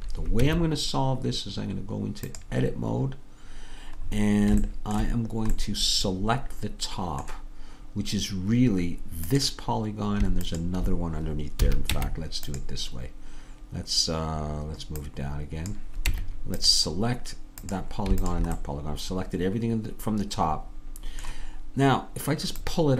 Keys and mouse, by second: 0.5 Tab, 11.7-12.7 drag, 11.7 a, 12.0 Tab, 15.1 click, 16.2 Tab, 16.2-17.4 drag, 17.7-18.8 drag, 19.6-21.7 drag, 22.6-22.9 drag.